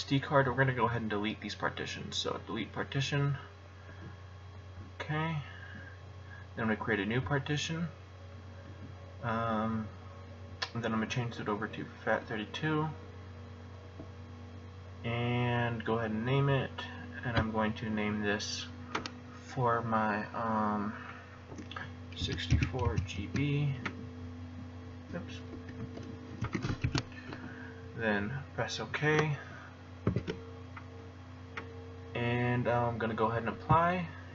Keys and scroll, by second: 21.9-23.6 typing, 25.5 Left, 25.8 Left, 26.4-27.3 typing, 30.0 alt+o.